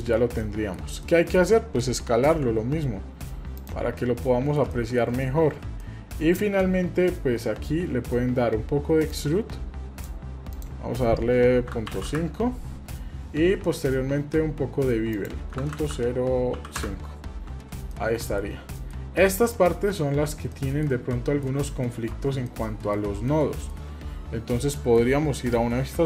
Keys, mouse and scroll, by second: 0.4 shift+middle click, 1.0 middle click, 1.5-1.8 middle drag, 1.8 scroll down 1, 2.4 s, 4.0-4.6 middle drag, 4.7 shift+middle click, 5.2-5.5 scroll up 2, 5.5 scroll down 1, 5.8 middle click, 9.1 click, 10.5-12.2 drag, 15.1-16.8 drag, 15.7 KP_0, 17.5 scroll down 2, 17.9 middle click, 18.5 scroll down 1, 18.7 middle click, 19.1-20.2 scroll up 4, 20.2 scroll down 2, 20.5 middle click, 21.2 shift+middle click, 21.5-22.0 shift+scroll down 2, 22.1 Tab, 22.5 middle click, 22.9-23.3 scroll down 2, 23.3 middle click, 24.6 scroll down 1, 24.8 middle click, 25.9 KP_7.